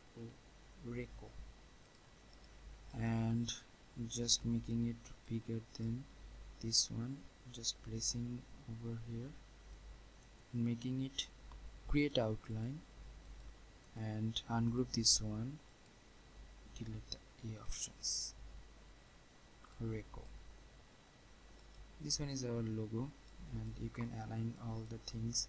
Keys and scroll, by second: 17.1 Delete.